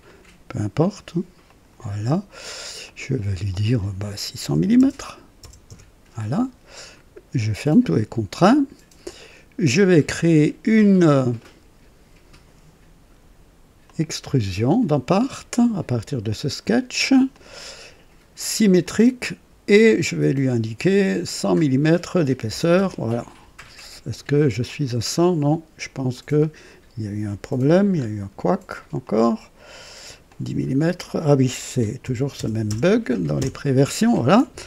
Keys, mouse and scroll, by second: 0.0 right click, 1.4 click, 2.8 click, 4.5 KP_6, 4.7 KP_0, 5.3 KP_0, 5.6 Return, 5.8 Return, 9.0 click, 10.0 scroll down 2, 13.8 click, 15.0 click, 17.2 click, 18.7 click, 21.2 click, 22.4 KP_0, 22.7 Return, 24.6 click, 26.1 click, 27.9 scroll up 2, 29.0 click, 30.2 click, 32.0 alt+KP_1, 32.3 alt+KP_0, 32.6 alt+KP_0, 33.3 Return.